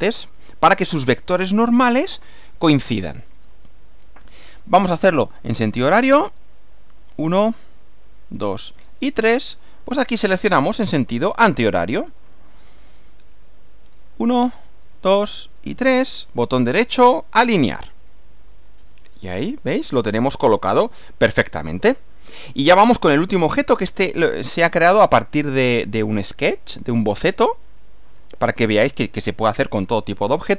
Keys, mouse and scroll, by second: 6.4 click, 8.1 click, 9.1 click, 10.1-11.1 middle drag, 11.4 middle click, 14.0 click, 14.9 click, 15.6 click, 16.3 right click, 17.0 click, 18.6 middle click, 19.6-22.6 middle drag, 22.9 middle click, 24.8-25.6 middle drag, 26.8 click, 28.2 click, 29.9-30.5 middle drag.